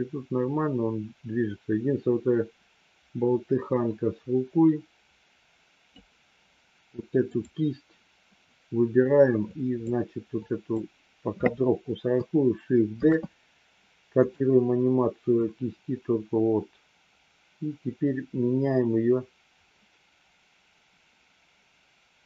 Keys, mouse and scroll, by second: 7.1 click, 9.5 click, 10.2 click, 13.0 shift+d, 15.4-22.2 drag.